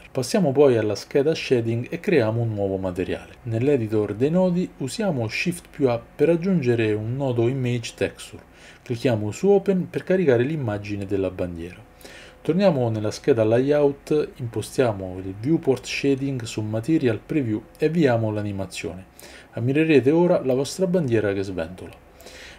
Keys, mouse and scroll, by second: 12.5 click.